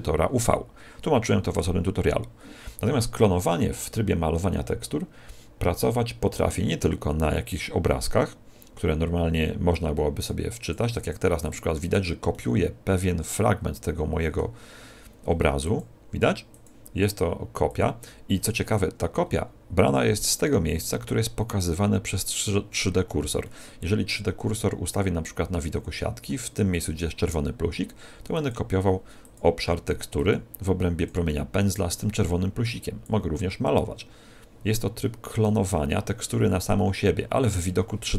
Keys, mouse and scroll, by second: 9.7 click, 10.5 click, 12.2 middle click, 15.6 click, 16.5 click, 18.8 scroll up 1, 19.3 scroll up 5, 23.4 middle click, 28.3 click, 31.9 click.